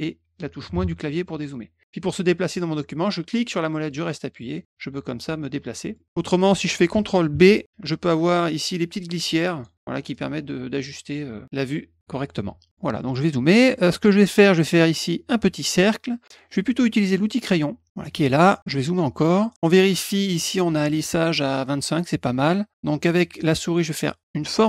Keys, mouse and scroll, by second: 3.3-5.9 middle drag, 7.3 ctrl+b, 8.7 click, 10.1-11.4 drag, 12.7 middle click, 13.1 middle click, 13.4 middle click, 14.0 middle click, 17.9 click, 18.6 middle click, 19.2 middle click.